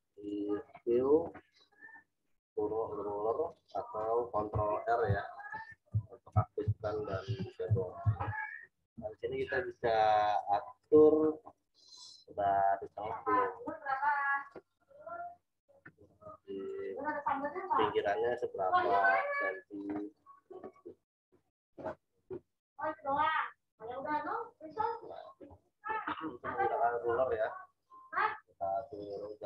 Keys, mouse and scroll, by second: 0.1 click, 3.9 click, 5.5 ctrl+r, 10.8-21.7 drag, 22.2 click, 29.1 click.